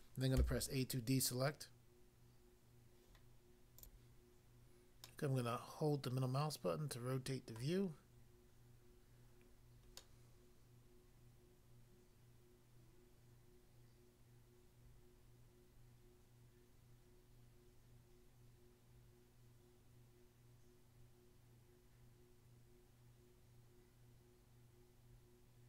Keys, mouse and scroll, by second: 0.4 a, 3.8 click, 4.0 click, 5.0 middle click, 7.6 middle click, 10.0 middle click.